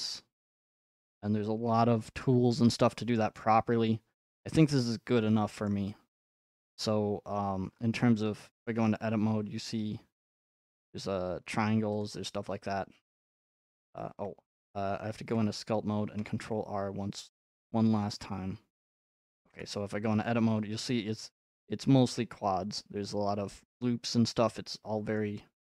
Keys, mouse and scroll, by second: 0.5 scroll up 2, 1.3 scroll up 5, 2.5 middle click, 3.2 middle click, 3.4 middle click, 3.5 scroll, 5.5-7.0 scroll up 8, 7.0 middle click, 7.1 middle click, 7.1 middle click, 7.7 middle click, 7.8 middle click, 8.7 Tab, 10.6-11.0 shift+scroll, 12.0 click, 12.0 scroll, 12.6 scroll up 3, 12.9 scroll, 14.1 Tab, 14.8 Tab, 17.7 scroll, 17.9 scroll up 3, 18.0 scroll, 18.2 scroll up 1, 19.5 Tab, 21.0 scroll, 21.5 scroll up 4, 21.6 scroll, 21.7 3, 22.1 click, 22.3-22.8 scroll, 23.0 2, 25.2 middle click.